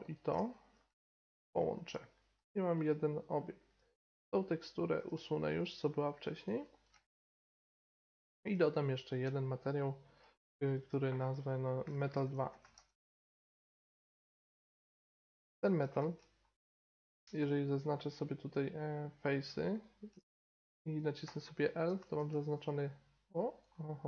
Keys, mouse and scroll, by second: 0.5-1.8 drag, 1.5 ctrl+j, 2.4 g, 3.8-5.6 drag, 4.4-5.6 right drag, 5.0 x, 6.1-6.4 right drag, 8.5-12.7 drag, 14.9-15.5 middle drag, 16.0 Tab, 18.2 middle click, 19.0-21.8 right drag, 19.2-21.3 drag, 21.3 l, 21.6 click, 21.8 middle click, 22.2 g.